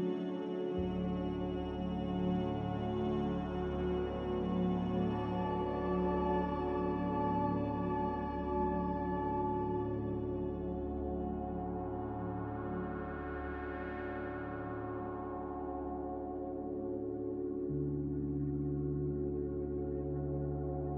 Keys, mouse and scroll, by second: 10.0 z, 12.8-14.7 typing.